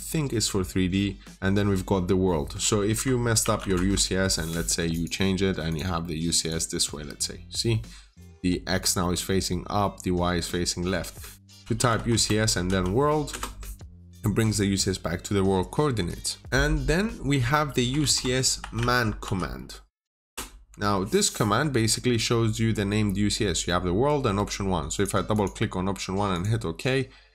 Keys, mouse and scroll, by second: 2.8 Escape, 3.3 typing, 3.6 Return, 4.8 click, 11.5-12.5 typing, 12.0 Return, 13.2 Return, 17.5-19.1 typing, 20.1 Return, 24.8 click, 25.2 double click, 26.2 click.